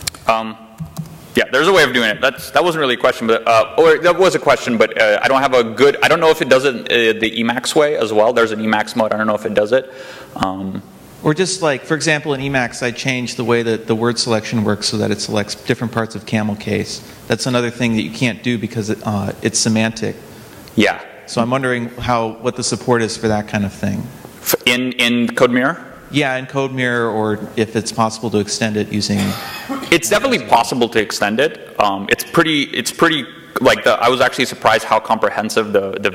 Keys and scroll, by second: 0.0-2.7 typing, 0.8 Return.